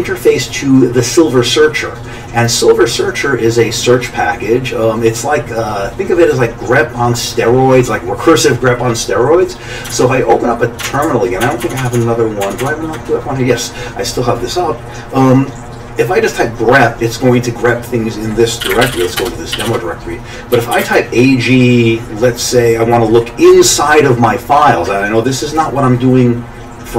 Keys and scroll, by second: 10.0 alt+Tab, 10.9 alt+Tab, 11.1 alt+Tab, 11.4-12.5 alt+Tab, 18.4-21.1 typing.